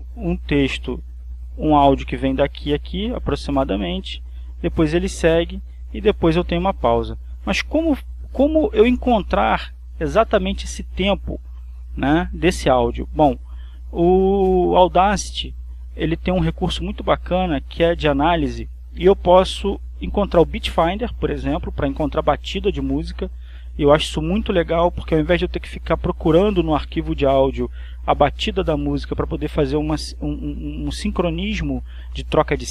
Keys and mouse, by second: 1.8-3.9 drag, 4.7-6.5 drag, 7.4 click, 17.4 click.